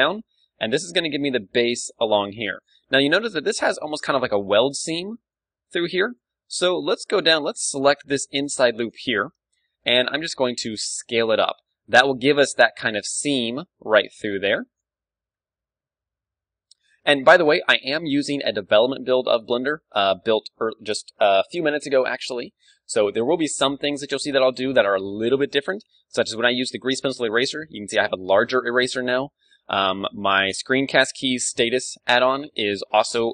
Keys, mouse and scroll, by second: 0.6-3.3 drag, 1.2 d, 2.6 d, 4.8 d, 5.3-7.0 drag, 6.1 d, 6.6-11.9 middle drag, 8.8-10.9 right drag, 10.1 s, 11.9-14.5 drag, 12.0 a, 12.4 d, 13.2 d, 13.5-15.4 right drag, 13.5 d, 14.7 d, 14.9-16.9 middle drag, 15.4 d, 16.7 right click, 17.5 d, 17.9-19.8 right drag, 18.4 KP_1, 19.3 ctrl+w, 25.9 d, 27.9 d, 28.1 d, 28.4 d, 29.5-33.3 middle drag, 30.2 n, 31.3 a, 32.6 a.